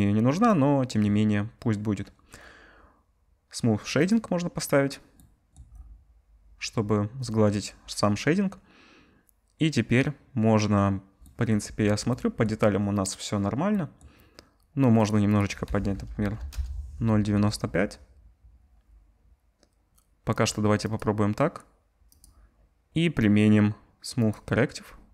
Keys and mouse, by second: 5.5-7.2 right drag, 7.2-11.4 middle drag, 11.4 right click, 12.1-13.9 middle drag, 13.9-15.1 drag, 15.1-25.1 middle drag.